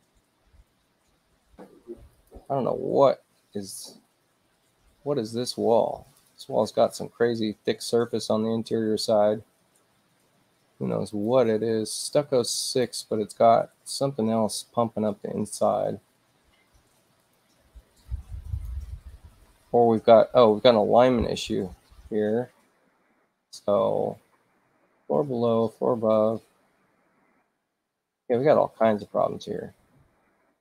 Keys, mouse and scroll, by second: 2.1 click, 6.0 click, 6.3 click, 11.1 click, 12.5 click, 17.2 click, 18.5 click, 21.9 ctrl+i, 23.7 shift+i, 24.6 shift+u, 25.7 shift+u, 26.5 shift+i, 27.0 shift+i, 29.3 shift+u, 30.3 shift+i.